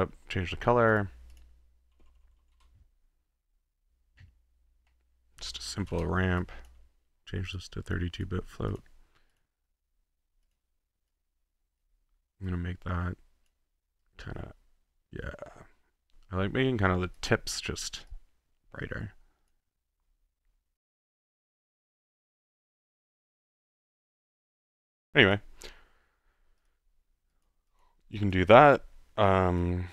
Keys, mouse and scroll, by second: 0.1 middle click, 0.9 click, 1.0 click, 1.4 click, 1.5-2.9 typing, 5.1-6.4 typing, 6.4 click, 7.4 click, 8.2 click, 8.7 click, 9.3 click, 10.4 click, 11.1 click, 12.5-13.6 drag, 14.5-17.3 drag, 18.1-19.6 drag, 21.2 click, 21.6 click, 22.6 click, 22.7 ctrl+z, 23.2 click, 23.4 click, 23.9 click, 24.1 click, 24.6 click, 24.7-25.1 drag, 25.4-26.1 drag, 25.5-26.6 middle drag, 26.7 click, 27.2 middle click, 27.3-27.6 drag, 27.9 click, 28.3 click, 28.7 middle click, 29.6 click.